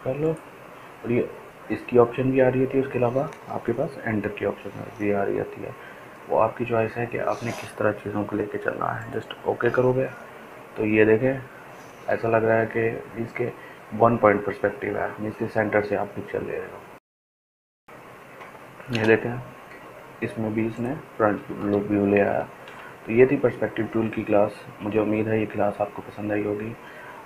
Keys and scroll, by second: 20.8 Return, 24.3 ctrl+alt+z.